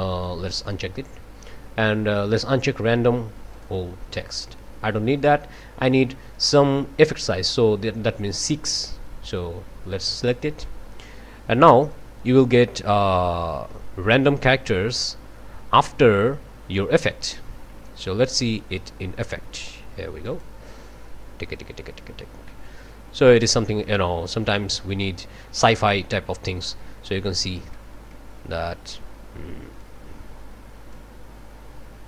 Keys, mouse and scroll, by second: 0.6 click, 3.5 click, 10.2 click, 11.9-19.1 drag, 20.2 click, 23.5 click, 24.3-26.8 drag, 27.0-27.6 scroll up 4, 27.7-28.3 drag, 28.6 scroll up 2, 29.8-31.1 drag, 31.6-32.0 scroll down 6.